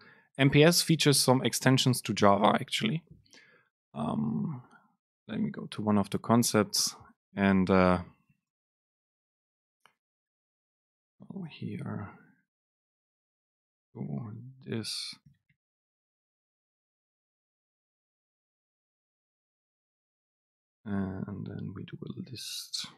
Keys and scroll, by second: 3.9 Return, 4.1 super+space, 5.1 BackSpace, 8.5 super+space, 9.4 Return, 9.8 super+space, 11.8 BackSpace, 18.8 BackSpace, 18.8 Down, 19.1 super+space.